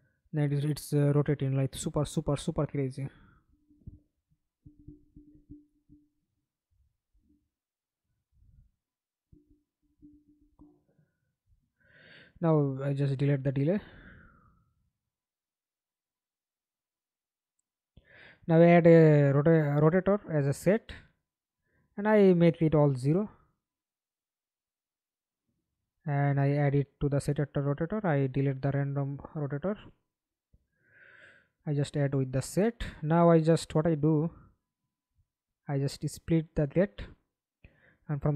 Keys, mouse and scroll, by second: 4.9 Escape, 5.2 middle click, 6.0 F11, 10.1 right click, 12.1 Delete, 15.7 double click, 18.5 right click, 19.9 double click, 21.6 0, 21.9 Delete, 22.9 Return, 28.1 Delete, 34.6 right click.